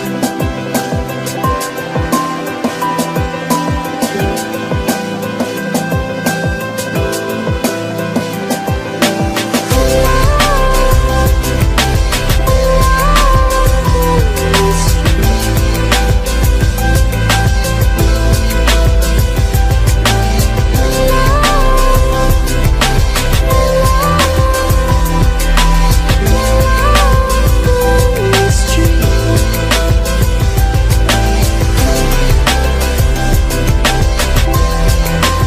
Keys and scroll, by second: 2.2 ctrl+t.